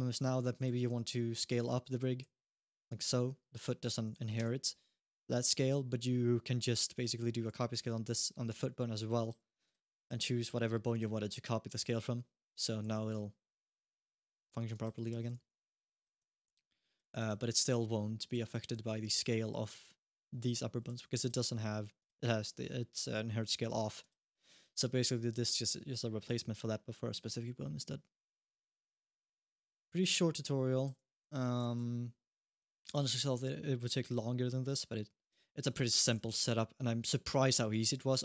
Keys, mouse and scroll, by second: 0.0 middle click, 0.1-0.7 scroll down 1, 0.7 s, 2.1 s, 2.9-4.1 scroll up 1, 4.2 alt+s, 5.4 click, 6.3 click, 6.7 click, 8.9 click, 9.8 click, 11.9-12.3 scroll down 1, 12.3 click, 12.6 s, 14.9 alt+s, 16.1 alt+s, 16.8 s, 17.4 click, 18.0 click, 18.3 g, 20.7 alt+g, 21.0 click, 21.8 click, 22.0-23.1 scroll down 3, 23.8 click, 29.1 click, 29.1 g, 30.6 click, 31.0 alt+g, 32.7 g, 35.2 scroll down 1, 35.5 alt+g, 37.6 alt+g, 38.0-38.2 scroll up 1.